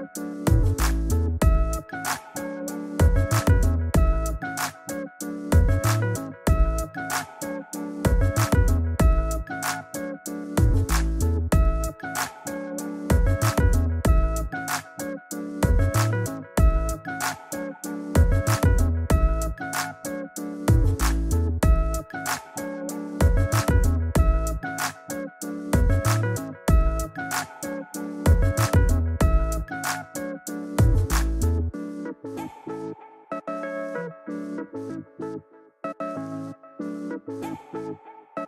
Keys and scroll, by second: 2.5 Return.